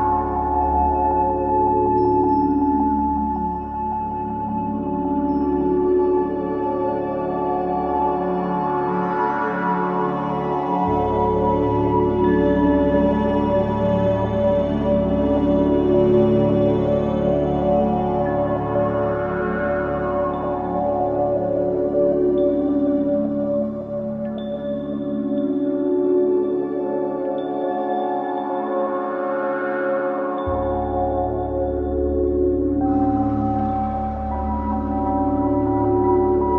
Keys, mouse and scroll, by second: 2.0-2.6 scroll down 1, 4.0-12.1 drag, 12.1-12.6 scroll down 1, 12.6 scroll up 1, 13.4-18.1 drag, 18.1-18.9 scroll down 1, 19.4 scroll up 1, 20.8-21.2 scroll down 1, 23.4 click, 24.8-25.4 scroll up 1, 26.1-31.4 drag, 31.4 ctrl+z, 32.7-33.1 scroll down 1, 33.2-33.6 scroll up 1, 34.4-35.9 drag, 36.3-36.5 scroll down 1.